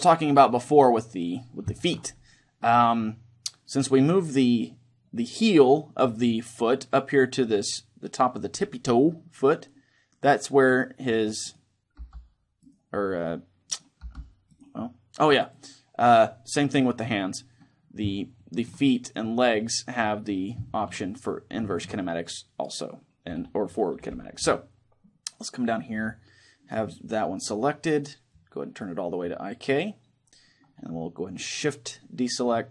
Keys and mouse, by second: 9.9-11.7 right drag, 11.7 click, 11.7 g, 12.0 middle click, 12.0-17.1 right drag, 12.9-14.9 middle drag, 13.8 g, 18.1-22.3 middle drag, 18.8-21.9 right drag, 22.4-24.1 right drag, 28.0-29.9 drag.